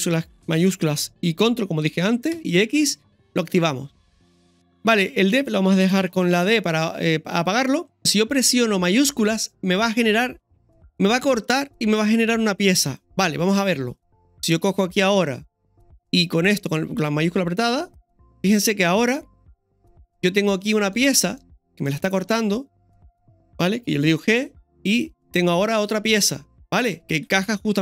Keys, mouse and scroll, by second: 2.3 ctrl+shift+x, 18.9-22.4 middle drag, 20.0-20.7 scroll up 3, 23.0 right click, 24.3 g, 25.3-26.7 middle drag, 27.3 ctrl+z.